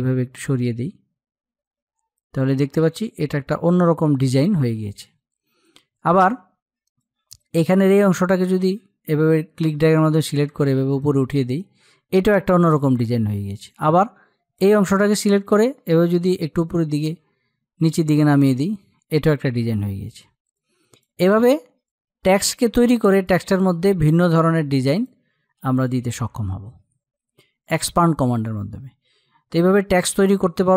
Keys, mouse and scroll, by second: 6.4-22.6 drag.